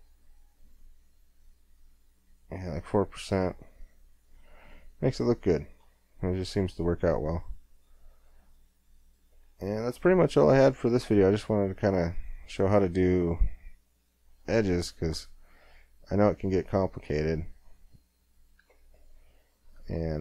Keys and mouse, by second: 3.4 middle click, 4.0 middle click, 4.4 middle click, 4.9 middle click, 9.1-11.2 middle drag, 11.2 click, 14.4-15.6 middle drag, 16.6 Tab, 19.0 middle click.